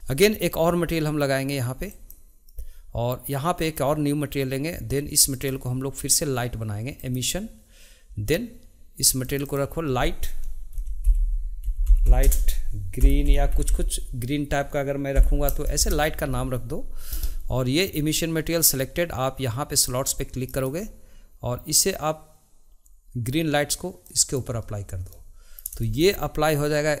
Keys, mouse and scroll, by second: 1.9-8.4 drag, 9.2 click, 9.4-12.6 drag, 13.6 e, 20.5-23.5 drag, 25.1-27.0 middle drag.